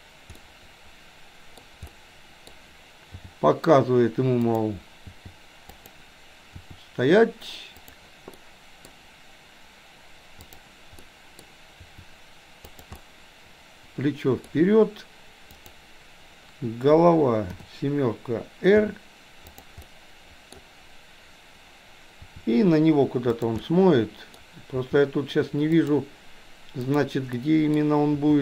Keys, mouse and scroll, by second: 0.4-1.6 middle drag, 1.9-2.6 middle drag, 3.2 g, 5.1 g, 6.6 r, 8.4 middle click, 10.5 click, 11.0 middle click, 11.9 r, 13.0-14.6 middle drag, 15.6 click, 17.6 KP_7, 18.7 r, 19.9 middle click, 22.2 r, 23.6-24.1 middle drag, 24.7 r, 27.0 click, 27.5 middle click, 28.2 r.